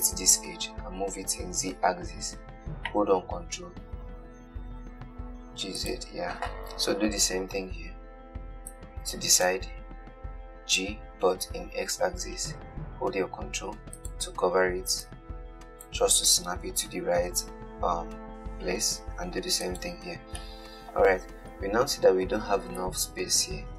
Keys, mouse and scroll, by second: 1.2 g, 3.7 g, 7.0 scroll down 3, 7.2 KP_1, 9.0 click, 11.0 g, 15.3 click, 17.1 g, 20.7-22.1 middle drag, 22.1-23.7 scroll down 2.